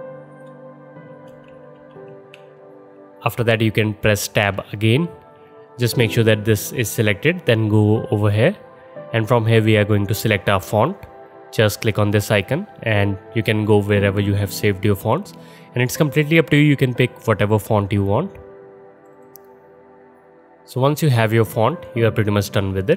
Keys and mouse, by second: 0.9-1.9 typing, 4.5 Tab, 4.5-7.6 middle drag, 7.6 click, 8.0-9.5 middle drag, 9.5-19.2 drag, 19.2-22.9 middle drag.